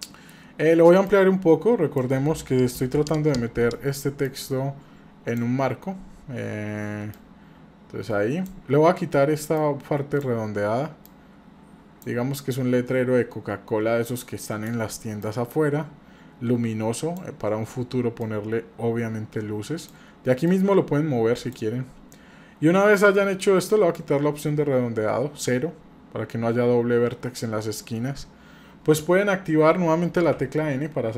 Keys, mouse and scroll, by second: 1.1 click, 2.8 KP_7, 4.3-5.4 drag, 7.1-8.6 drag, 9.6 click, 11.1 click, 12.6-14.8 drag, 15.2-17.2 drag, 18.2-19.9 drag, 20.5-21.6 drag, 23.7 click, 30.3 n.